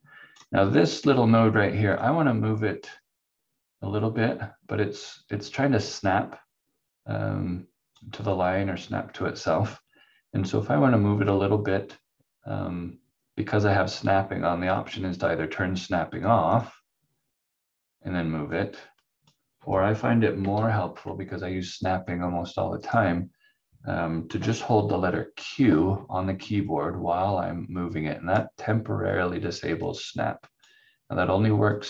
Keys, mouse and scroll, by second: 16.5 click, 20.5 ctrl+z, 22.8 click, 25.7 q, 26.6 click, 30.1 click.